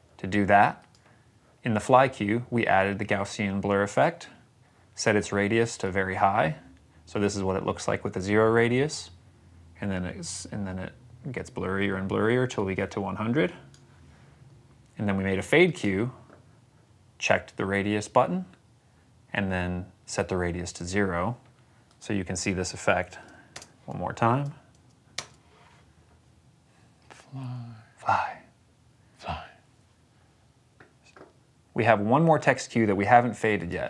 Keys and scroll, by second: 22.8 s, 23.4 space, 25.0 space.